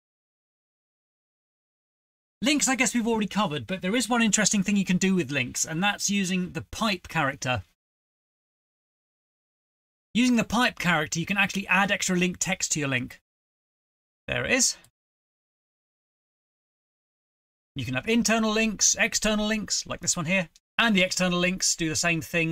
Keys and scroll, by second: 6.3-12.1 typing, 16.2-18.5 typing, 17.4 ctrl+c, 17.9 Return, 18.1 Return, 18.5 ctrl+v, 20.4-21.7 typing.